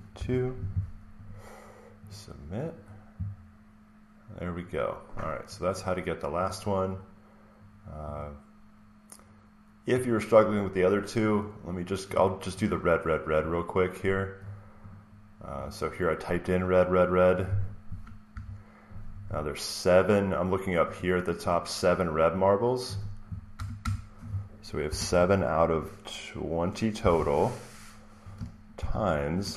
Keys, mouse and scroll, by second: 0.0-1.2 typing, 1.2 click, 2.3 typing, 2.3-3.7 drag, 3.5-4.0 scroll up 4, 3.8 click, 5.4 click, 5.7 click, 8.0 click, 11.3 click, 12.0 click, 13.3 click, 14.8 click, 15.6 click, 17.3 click, 20.9 click, 22.3 click, 23.4-25.4 typing, 26.6-27.4 typing, 28.4-29.2 typing.